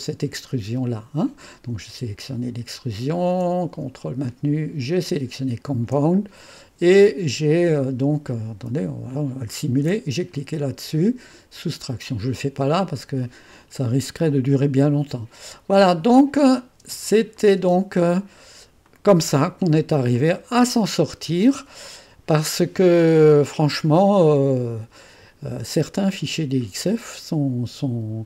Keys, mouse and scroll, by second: 0.0 click, 0.5 space, 9.5 click, 15.8 click, 16.5 click, 16.9-17.7 typing, 17.4 click, 18.8 click, 20.2-23.7 drag, 24.3-25.7 drag.